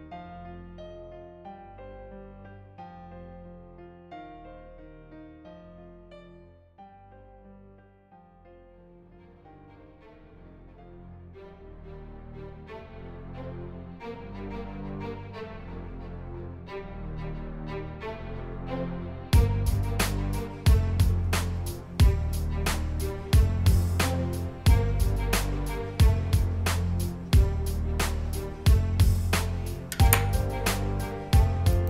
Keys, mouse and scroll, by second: 0.1 click, 0.6 click, 0.7 click, 0.9 click, 1.3 click, 1.4 click, 1.7 click, 2.1 click, 2.3 click, 2.6 click, 2.9 click, 3.4 scroll up 1, 3.6 click, 3.8 click, 4.1 click, 4.3 click, 4.6 click, 4.7 click, 4.8 click, 4.9 click, 5.1 click, 5.4 click, 5.5 click, 5.8 click, 6.0 click, 6.1 click, 6.3 click, 6.5 click, 6.9 click, 7.0 click, 7.5 click, 7.7 click, 8.0 click, 8.2 click, 8.3 click, 8.5 click, 8.7 click, 8.8 click, 9.0 click, 9.2 click, 9.3 click, 9.6 click, 9.7 click, 10.0 click, 10.5 click, 11.4 click, 11.7 click, 11.9 click, 12.1 click, 12.2 drag, 12.3 click, 12.4 click, 12.5 click, 12.6 click, 12.7 click, 12.8 click, 13.1 click, 13.4 click, 13.5 click, 13.6 click, 14.5 click, 14.8 click, 15.0 click, 15.3 click, 15.4 click, 15.5 click, 16.0 click, 16.5 click, 16.7 click, 16.8 click, 17.5 click, 17.9 click, 18.5 drag, 18.9 ctrl+z, 19.2 click, 19.4 click, 19.7 drag, 20.0 click, 20.2 click, 20.5 click, 20.7 drag, 22.0 click, 22.9 click, 24.7 click, 25.0 click, 25.3 click, 25.6 click, 25.8 click, 26.0 click, 26.3 click, 26.4 click, 26.7 click, 26.9 click, 27.1 click, 27.4 click, 27.6 click, 27.9 click, 28.1 click, 28.3 click, 28.5 click, 28.7 drag, 31.7 click.